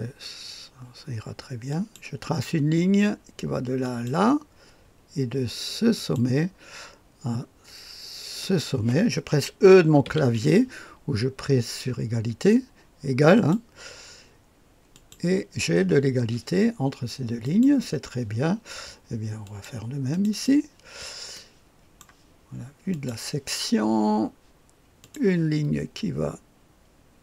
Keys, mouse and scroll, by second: 1.7 click, 3.8 click, 5.9 click, 8.4 click, 10.0 e, 13.3 click, 14.9 click, 17.4 click, 19.4 click, 20.1 click, 20.4 drag, 21.3-22.4 right drag, 22.9 click, 25.0 click.